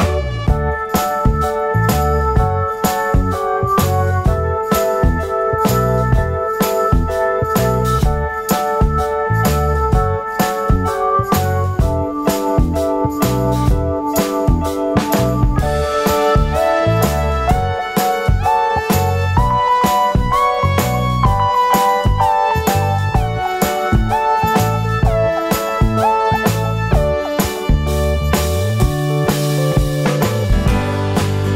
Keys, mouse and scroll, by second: 3.2 scroll up 2, 14.0-14.6 scroll down 1, 20.1 KP_0, 21.8 g, 24.2 g, 26.6-27.2 scroll down 1, 27.8 scroll down 1, 29.2-29.8 scroll down 1.